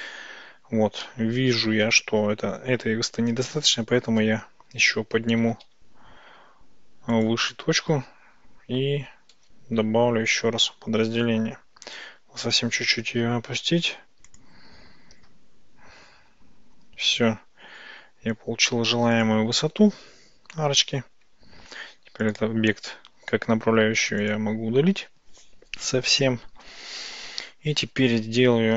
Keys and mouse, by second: 1.3 ctrl+shift+z, 4.3 ctrl+z, 5.5 g, 5.7 y, 7.2 click, 9.4 ctrl+shift+b, 13.1 g, 13.3 y, 14.3 click, 15.2 ctrl+shift+b, 19.2 click, 20.9 Tab, 22.3 click, 23.8 x.